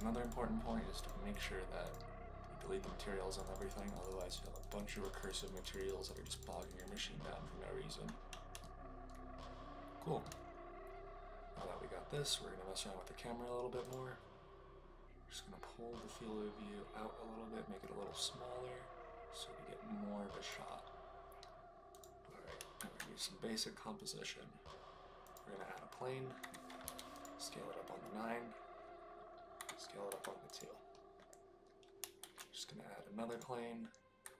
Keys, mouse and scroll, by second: 0.2 click, 0.9 click, 1.3 click, 1.8 click, 3.4 drag, 3.9 click, 4.0 click, 4.2 click, 4.4 click, 4.5 click, 4.7 click, 4.9 click, 5.1 drag, 6.0 click, 6.3 click, 6.5 click, 6.6 click, 8.5-10.2 shift+middle drag, 15.3-20.5 drag, 21.9 click, 22.7 shift+a, 26.3 s, 26.8 9, 27.1 click, 29.5 s, 30.0 2, 30.4 click, 32.1 shift+a, 34.2 s.